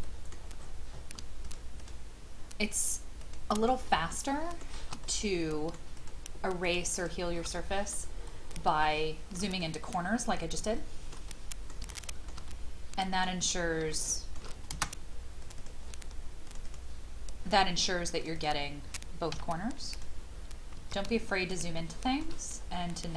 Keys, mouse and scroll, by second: 0.3 middle click, 0.6-1.2 scroll up 1, 1.4 shift+click, 1.8 shift+click, 2.6 shift+click, 3.2 shift+click, 3.5 shift+click, 4.1 shift+middle click, 5.0 middle click, 6.6 shift+click, 6.9 shift+click, 7.5 middle click, 8.0-8.6 scroll down 1, 8.8 shift+middle click, 9.6 middle click, 10.1 scroll down 1, 10.7 shift+middle click, 11.9 shift+middle click, 12.5-13.6 middle drag, 13.9 shift+middle click, 15.4 click, 17.5-18.2 scroll up 1, 18.2 click, 19.3 m, 19.9 click, 20.3-20.7 scroll down 1, 21.2-21.5 shift+scroll down 1, 21.8 shift+middle click, 22.5 scroll up 1.